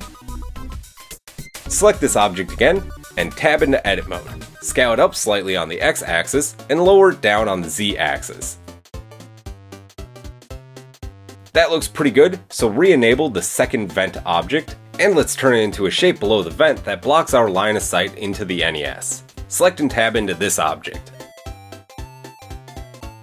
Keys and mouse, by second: 0.8 middle click, 1.4 middle click, 1.6-5.4 drag, 2.6-3.0 middle drag, 2.6-3.0 right drag, 3.5 KP_7, 4.0 Tab, 5.4 s, 7.2-11.9 middle drag, 7.3 Tab, 9.2 g, 11.9 click, 12.0-17.1 middle drag, 17.1-19.6 drag, 19.4 middle click, 19.4 right click, 19.9 Tab, 20.3 shift+middle click, 21.0-22.1 middle drag, 23.1-23.2 middle drag.